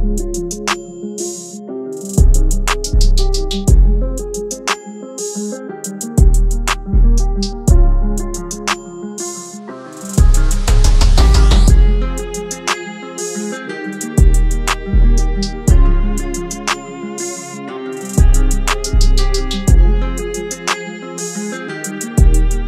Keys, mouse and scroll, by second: 1.1-3.7 scroll up 1.